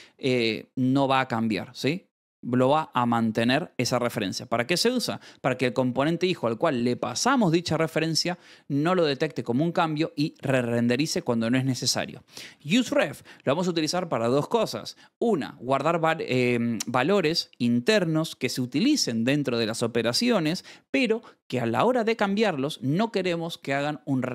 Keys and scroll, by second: 10.6 Escape, 11.9-13.2 typing, 22.0 v.